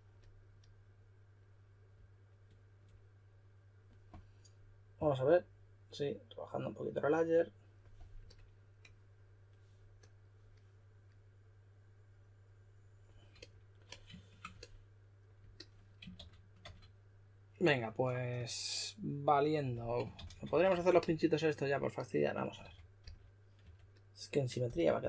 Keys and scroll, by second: 16.1-16.6 typing, 20.1-20.7 typing, 22.6-23.6 typing, 24.7-25.0 typing.